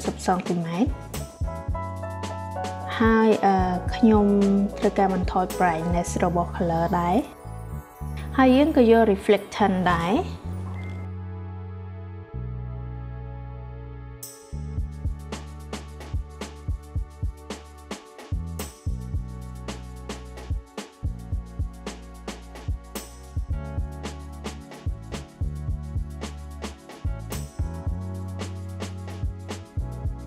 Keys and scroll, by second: 0.6-2.2 typing, 4.9 8, 6.2 0, 17.3 5, 17.6 0.